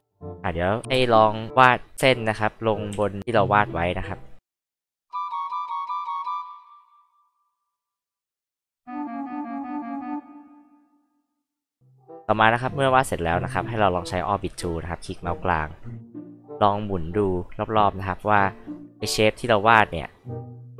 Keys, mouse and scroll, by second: 0.1 alt+click, 0.9 alt+h, 1.0-1.4 alt+drag, 2.9 alt+l, 3.4 alt+click, 4.2 alt+click, 4.6 alt+click, 5.0 alt+click, 5.3 alt+click, 5.5 alt+click, 6.0 alt+click, 6.3 alt+click, 6.6 alt+click, 7.1 alt+click, 7.4 alt+click, 7.6 alt+click, 7.9 alt+click, 8.1 alt+click, 8.3 alt+click, 8.7 alt+click, 9.1 alt+click, 9.4 alt+click, 9.8 alt+click, 10.1 alt+click, 10.4 alt+click, 10.8 alt+click, 11.2 alt+click.